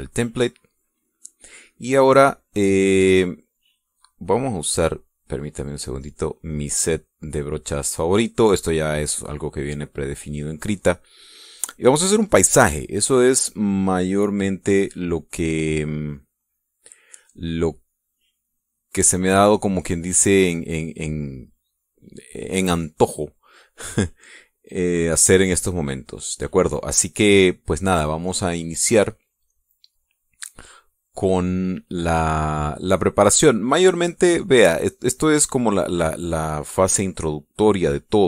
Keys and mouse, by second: 5.0 click, 5.7 click, 6.3 click, 6.7 click, 15.9 click, 22.6 click, 29.1 click, 30.3 click, 32.8 click, 33.4 click, 34.4 click.